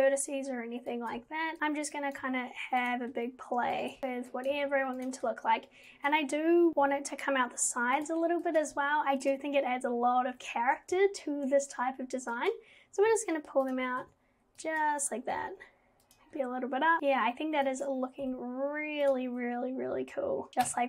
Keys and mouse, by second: 1.1 click, 1.2 g, 2.1 click, 2.2 g, 3.9 click, 4.0 g, 4.3 click, 4.5 g, 6.1 click, 6.8 g, 8.6 click, 8.8 g, 12.4 click, 13.1 g, 14.6 click, 15.4 g, 17.0 click, 17.8 click, 18.2 g, 20.7 Tab.